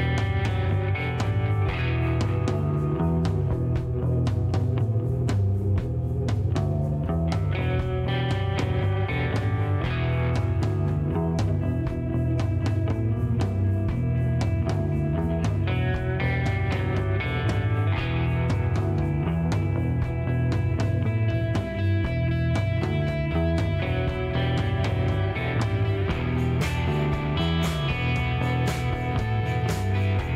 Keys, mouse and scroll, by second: 0.5 ctrl+click, 1.4 ctrl+click, 3.1 click, 5.3 KP_5, 7.3 click, 9.5 shift+right click, 12.6 shift+middle click, 13.0 shift+right click, 14.9 click, 16.0 ctrl+click, 16.7 ctrl+shift+right click, 18.4 ctrl+click, 19.5 ctrl+click, 20.2 shift+right click, 22.2 ctrl+click, 23.1 ctrl+click, 25.3 click, 27.6 KP_2, 29.9 click.